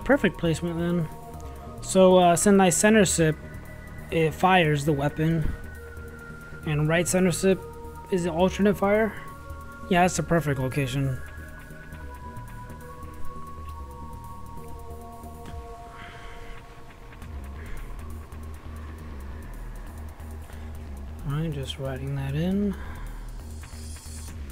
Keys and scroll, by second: 9.5-11.0 typing, 12.0 z, 12.9 space, 14.4 ctrl+x, 14.7 ctrl+v, 17.6-19.9 typing, 21.1 w.